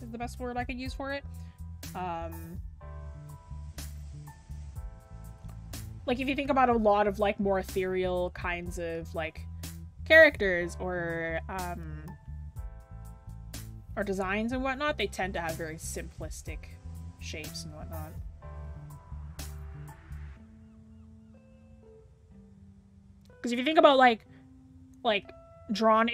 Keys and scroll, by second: 7.6 scroll down 1, 7.6-8.8 scroll up 1, 14.7-15.0 scroll down 1, 15.6-17.6 scroll up 1.